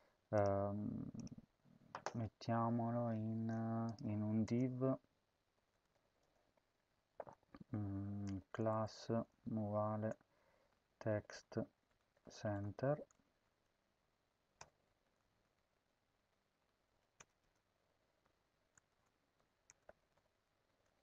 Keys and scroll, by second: 4.3 Return, 4.5-6.2 typing, 7.9-13.2 typing, 14.5 BackSpace, 14.7 Right, 15.1 shift+\, 15.5 Down, 16.1 Home, 16.3 Tab, 16.7 End, 16.9 Return, 17.3-20.5 typing.